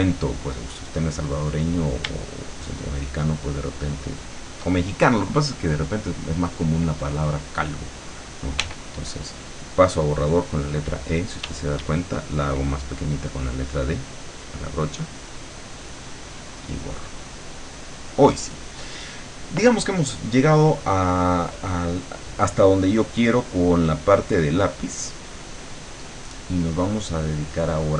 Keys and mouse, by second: 0.1 click, 2.6-4.6 shift+drag, 6.0 click, 6.9 click, 8.6 e, 11.5 d, 12.0-15.5 drag, 15.7-16.9 drag, 17.0-18.4 drag, 23.3-25.8 drag, 27.7 click.